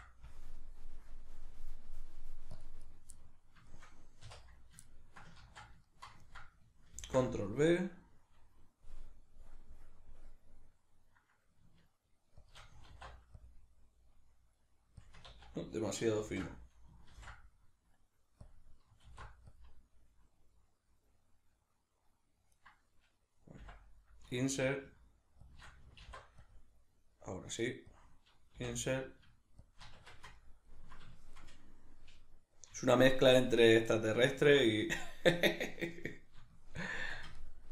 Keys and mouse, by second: 2.9 right click, 3.1 middle click, 4.3 3, 4.9 ctrl+middle click, 5.4 ctrl+z, 5.9-12.5 ctrl+middle drag, 7.0 ctrl+b, 12.5 shift+click, 12.9 alt+e, 15.1 click, 15.3 ctrl+z, 18.5 click, 19.1 alt+e, 22.6 right click, 23.6 i, 25.6 shift+click, 26.0 alt+e, 28.0 click, 29.7 shift+click, 30.0 Tab, 30.4-36.7 ctrl+middle drag, 37.0 Tab, 37.0-37.7 middle drag.